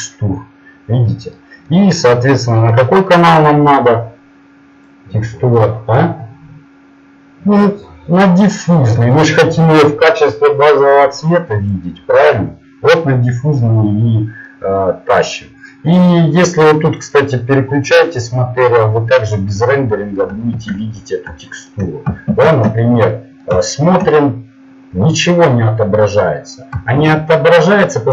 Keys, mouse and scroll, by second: 7.9-11.7 drag, 13.7-15.2 middle drag, 17.0-19.0 drag, 20.8 shift+z, 21.4 middle click, 22.4 shift+space.